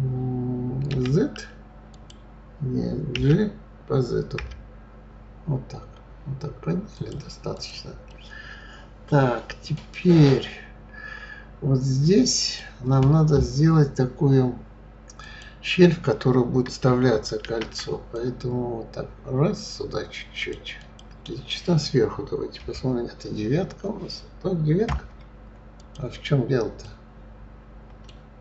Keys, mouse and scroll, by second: 0.9 z, 3.1 g, 7.5 click, 8.1-10.4 middle drag, 10.4 scroll up 2, 12.4 click, 15.2 click, 17.4 ctrl+r, 22.6 KP_9, 24.8 KP_9, 25.8 click, 26.8-28.4 middle drag.